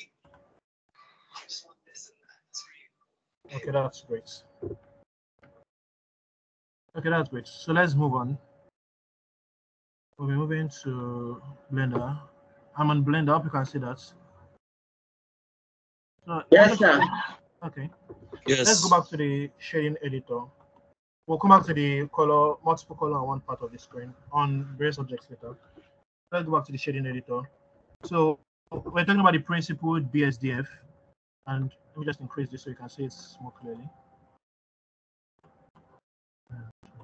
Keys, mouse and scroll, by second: 14.3-16.4 scroll down 1, 16.4 scroll down 2, 18.2 middle click, 18.2-18.6 scroll up 1, 20.2-22.4 scroll up 2, 22.4 scroll down 1.